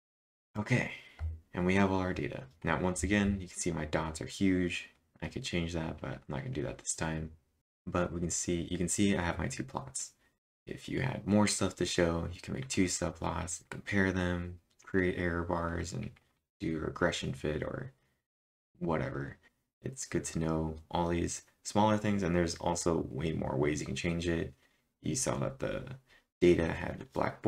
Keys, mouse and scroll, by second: 0.0-0.3 typing, 2.6-3.3 typing, 19.2-20.0 typing, 19.5 click, 19.5 scroll up 1.